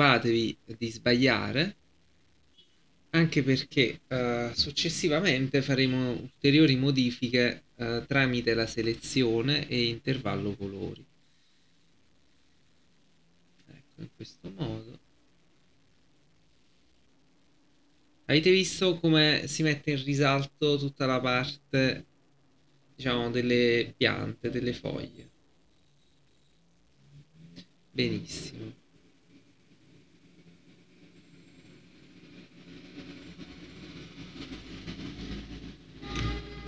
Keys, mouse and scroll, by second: 36.2 alt+scroll up 1.